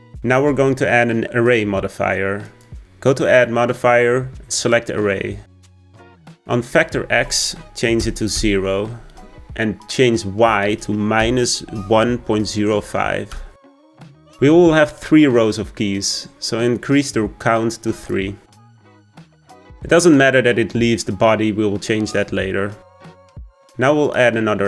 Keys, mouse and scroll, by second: 3.4-7.5 drag, 8.6-11.7 drag, 12.5-15.5 drag, 20.0-23.0 drag, 23.0-23.9 scroll down 1, 23.9-24.6 scroll down 1.